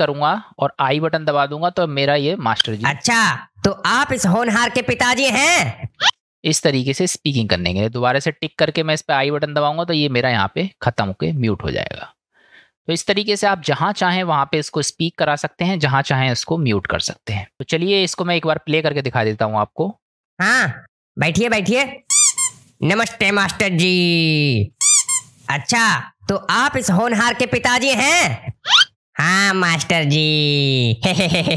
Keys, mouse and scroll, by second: 0.3 click, 2.6 space, 6.1 space, 8.2 click, 13.8-14.5 middle drag, 15.2-15.9 middle drag, 16.9-17.2 shift+middle drag, 17.5-18.3 drag, 20.1 space.